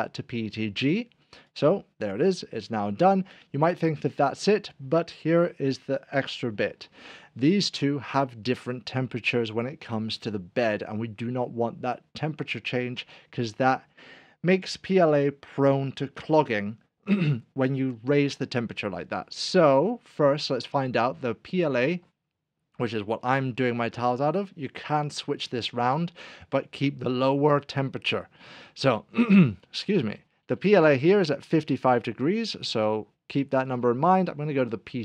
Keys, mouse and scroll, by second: 1.5 right click, 2.3 click, 6.1-6.4 scroll up 1, 20.8 click, 30.2-32.3 scroll down 1, 33.7 scroll down 1, 33.7 click.